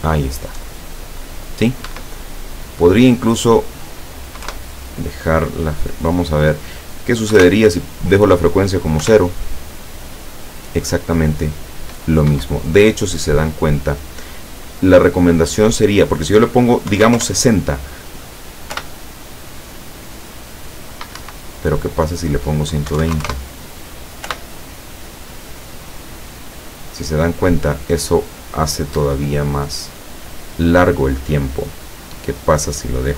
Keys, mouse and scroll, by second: 1.9 Escape, 3.4 click, 4.5 KP_Enter, 6.5 click, 7.3 KP_0, 9.1 p, 12.4 Escape, 15.9 click, 16.9 KP_6, 17.1 KP_0, 17.2 KP_Enter, 18.8 p, 21.2 Escape, 22.1 click, 22.9 KP_1, 23.0 KP_2, 23.2 KP_0, 24.3 p, 29.0 Escape, 32.4 click.